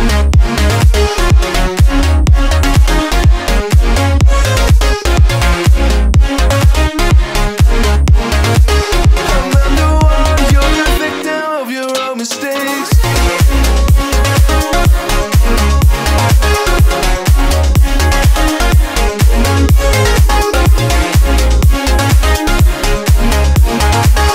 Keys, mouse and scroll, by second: 0.3-0.7 middle drag, 0.7-2.0 scroll up 14, 1.2-1.7 middle drag, 2.0-2.6 middle drag, 2.6-3.1 scroll down 8, 3.1-4.3 middle drag, 4.3-4.9 scroll up 1, 4.9 click, 5.2-5.5 scroll up 4, 5.5-7.5 middle drag, 7.5 1, 10.5 click, 11.0-11.5 scroll down 5, 11.5 scroll up 3, 11.9 click, 13.1 Tab, 13.6 middle click, 13.9 scroll up 4, 14.6 click, 15.1-18.1 middle drag, 19.4-22.9 middle drag, 22.9-24.0 scroll down 6, 24.0 click, 24.2 click.